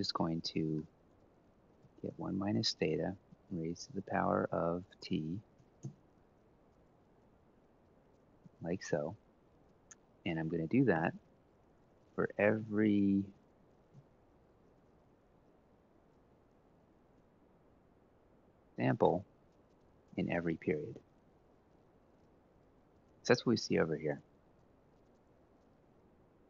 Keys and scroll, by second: 0.3-1.5 typing, 5.3 Left, 5.5 Left, 6.5 F4, 6.7 F4, 10.7 Return, 11.2 Left, 11.5 ctrl+Down, 12.1 Right, 12.3 1, 12.5 Up, 13.4 Up, 13.7 ctrl+Right, 14.0 Down, 14.6 ctrl+Left, 15.2 ctrl+c, 15.8 ctrl+shift+Right, 15.8 ctrl+shift+Down, 16.4 ctrl+v.